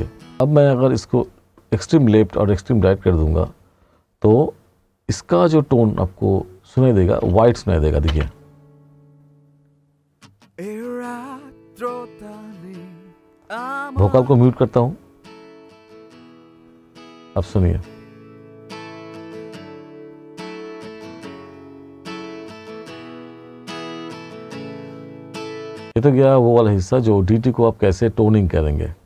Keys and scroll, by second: 8.1 space.